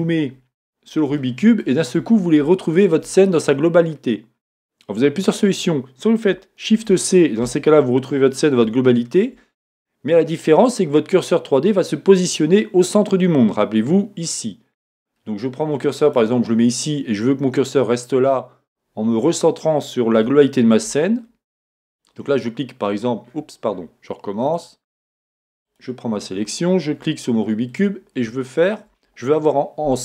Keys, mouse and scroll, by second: 0.8 click, 0.8-1.2 scroll down 2, 1.2-16.0 shift+middle drag, 2.1-2.5 scroll up 2, 6.7 shift+c, 9.3-13.2 shift+scroll up 1, 16.0 click, 16.7 click, 19.1 scroll up 1, 20.3 shift+middle click, 20.9-21.8 scroll up 2, 21.8 scroll up 1, 21.9 click, 23.2 scroll down 1, 24.5 click, 25.7 click, 26.3 scroll up 1, 27.7 click, 28.3-30.0 shift+middle drag.